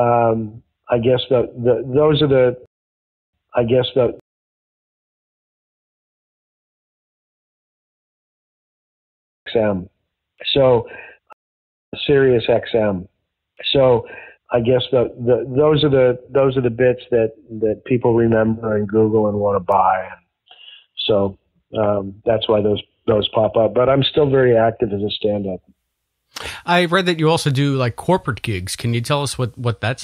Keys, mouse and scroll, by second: 1.5-2.5 drag, 2.6 space, 3.1 ctrl+shift+Delete, 3.2 space, 4.1 space, 4.3 click, 5.4-7.3 drag, 7.6 s, 8.0 click, 9.3 click, 9.3 space, 11.2 space, 11.8 click, 11.8 space, 15.8 click, 16.3 click, 17.0 click, 17.5 ctrl+s, 18.8 click, 21.0-22.3 drag, 28.2 click, 28.7-29.8 drag.